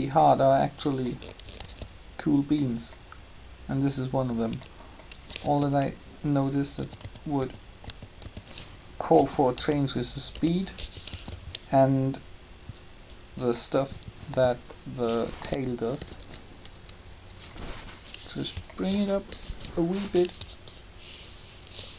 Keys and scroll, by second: 1.5 alt+a, 5.4 alt+a, 6.8-10.8 typing, 11.1 alt+a, 15.7 Up, 19.5 3.